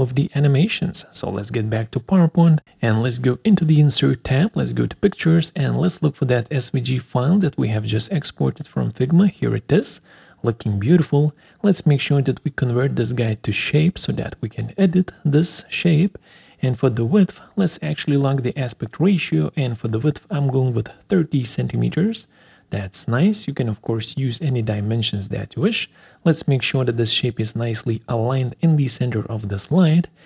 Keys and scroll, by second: 24.3 Return, 26.2 ctrl+alt+Right, 26.5 ctrl+alt+Down.